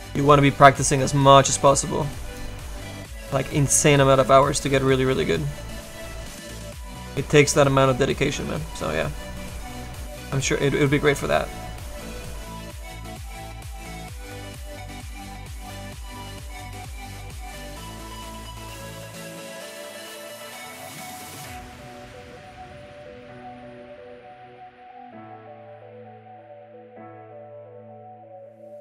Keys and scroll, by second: 24.3 s, 24.9 s, 25.5 s, 25.8 s, 28.2 s.